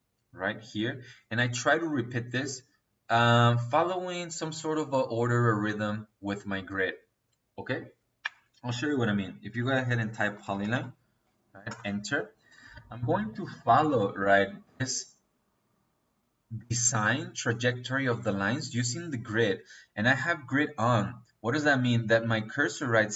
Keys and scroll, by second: 9.3 Escape, 10.1 p, 10.4 o, 10.6 l, 10.8 y, 11.5 Return.